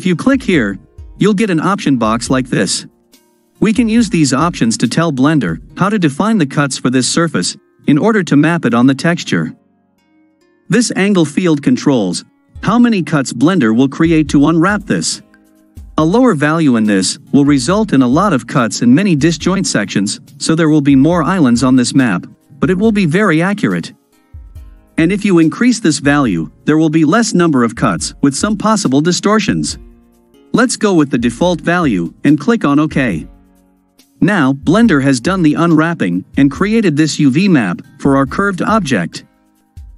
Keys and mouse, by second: 28.1-32.9 drag.